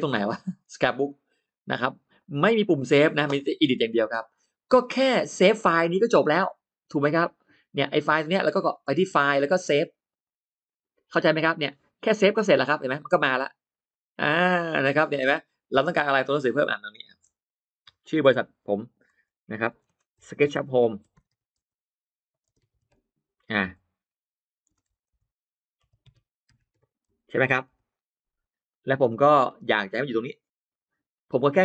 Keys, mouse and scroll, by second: 0.9 click, 2.0 click, 4.2 scroll down 1, 4.6-5.0 scroll up 1, 8.9 click, 9.9 click, 15.2-15.6 scroll up 1, 15.8 click, 16.6-17.6 drag, 17.8 click, 18.9-25.0 typing, 19.7 Caps_Lock, 26.9 d, 26.9 t, 26.9 l, 28.5 click, 29.1 click, 29.7 click, 30.6 click, 30.9-31.3 scroll down 1.